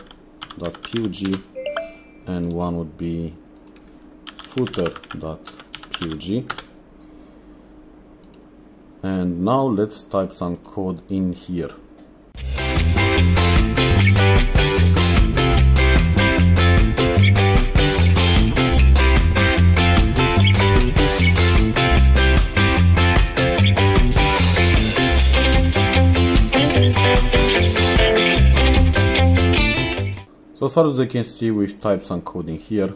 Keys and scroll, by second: 0.0-0.9 typing, 1.3 Return, 4.0-6.6 typing, 12.4-27.7 typing, 22.1 Return, 28.4 Escape.